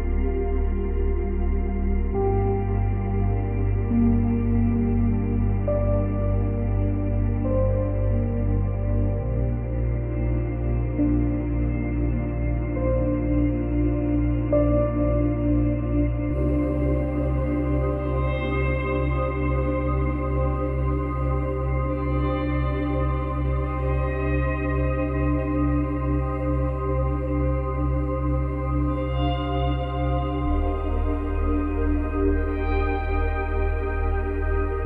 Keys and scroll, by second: 12.6 space, 14.0 space, 16.5 space, 17.3 space, 27.8 ctrl+z.